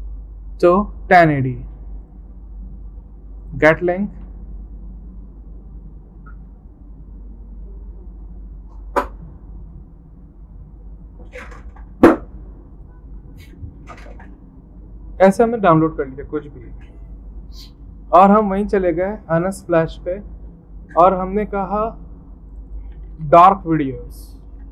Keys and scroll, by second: 22.7-24.7 typing.